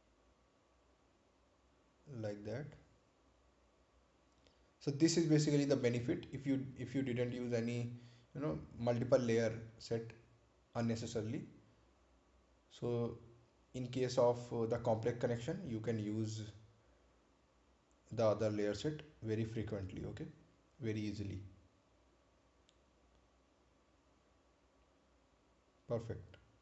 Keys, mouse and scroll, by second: 4.5 scroll up 1, 5.1-5.5 scroll down 1, 10.1 click, 19.4 click, 21.6-22.1 scroll down 1, 23.1 right click, 24.1-25.3 scroll down 1, 25.3 click.